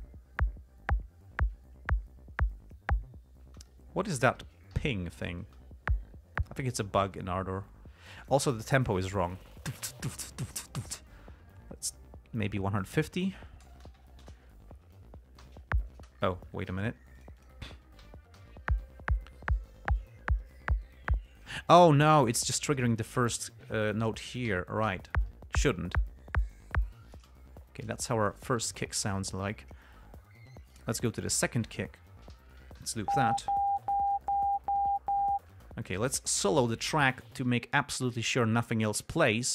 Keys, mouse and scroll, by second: 3.8 space, 5.2 g, 5.5 click, 5.8 space, 6.8 space, 8.4 click, 9.9 click, 10.3 click, 10.7 click, 11.0 click, 13.1 click, 13.9-17.0 typing, 17.1 click, 17.5 click, 18.3 ], 18.7 l, 21.9 space, 22.5 scroll up 2, 24.8 ], 25.2 l, 27.5 space, 27.9 g, 28.3 ctrl+scroll up 2, 31.1 click, 31.8 click, 32.7 ], 33.1 l, 33.8-34.7 scroll down 7, 35.4 ctrl+scroll up 2, 35.9 ctrl+space, 36.8 click.